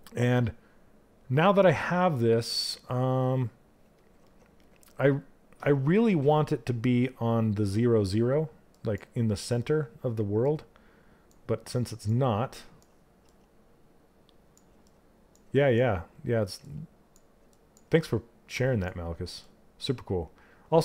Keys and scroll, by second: 12.8 s, 16.1 s.